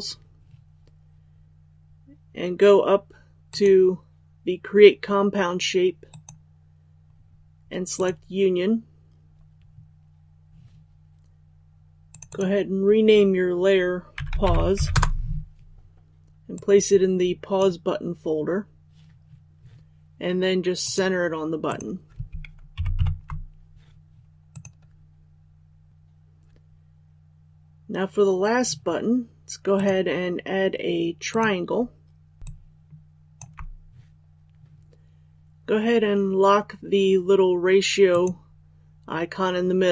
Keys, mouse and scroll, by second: 3.4 click, 14.9 Return, 16.5-18.4 drag, 22.7 shift+Up, 22.9 shift+Up, 24.5 click, 32.7 shift+click, 38.1 click.